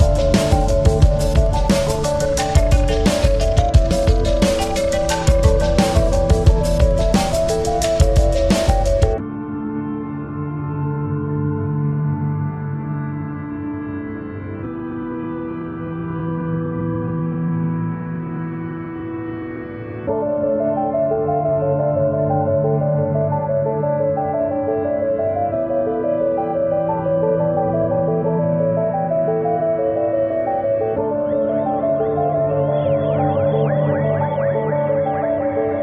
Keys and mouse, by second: 1.3 click, 4.5 click, 6.6 click, 6.6 click, 9.2-10.6 drag, 10.8 click, 12.8 click, 14.7 click, 16.6 click, 19.0 click, 20.2 click, 23.0 click, 24.1 click, 25.2 click, 30.7 click, 30.9 ctrl+=, 31.7 space, 32.0 click, 32.2 space, 33.4 click, 34.8 click.